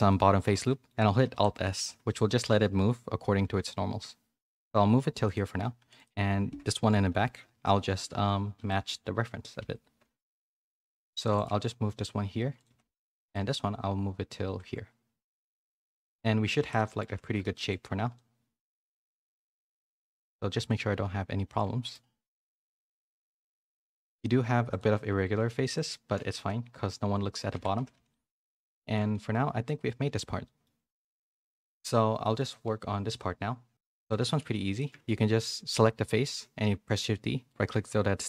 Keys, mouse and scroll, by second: 0.3 middle click, 1.3 alt+s, 5.9 click, 6.8 KP_1, 7.1 KP_3, 7.5 KP_1, 8.0 z, 8.6 shift+middle click, 9.6 1, 10.8 a, 10.9 a, 11.1 c, 11.4 g, 12.6 a, 12.8 a, 12.9 c, 13.3 g, 16.0 z, 16.6 Tab, 16.7 middle click, 17.1 a, 17.2 a, 17.5 shift+middle click, 18.1 middle click, 19.3 middle click, 20.1-21.5 shift+middle drag, 21.7 shift+middle click, 22.2 middle click, 23.0 shift+middle click, 23.4 middle click, 25.1 Tab, 25.3-27.9 typing, 25.6 click, 27.5 Tab, 28.1 middle click, 28.7 middle click, 29.1 shift+middle click, 29.6 middle click, 30.1 a, 30.4 middle click, 31.0 middle click, 31.7 a, 32.2 middle click, 33.9 click, 34.1 Tab, 34.7 click, 35.0 middle click, 36.6 shift+d.